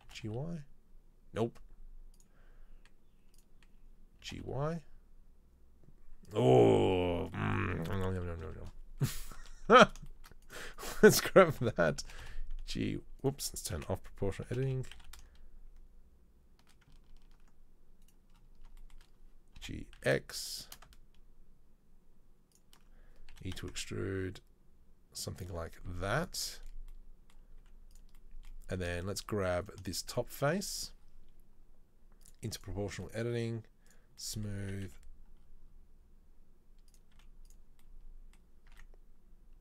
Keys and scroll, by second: 0.2 g, 4.2 g, 8.4 KP_3, 8.6 KP_1, 9.7 a, 11.7 ctrl+l, 12.2 g, 13.8 o, 14.6 g, 19.8 g, 23.3 e, 26.1 z, 27.7 z, 34.8 s, 37.2 z, 38.9 Tab.